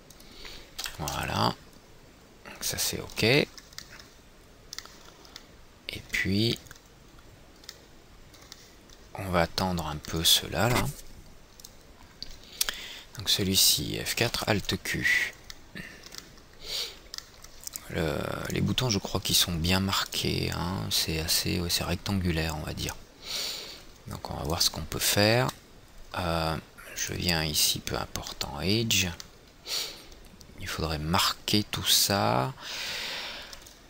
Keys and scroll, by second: 1.5 F3, 14.0 F4, 14.8 alt+q.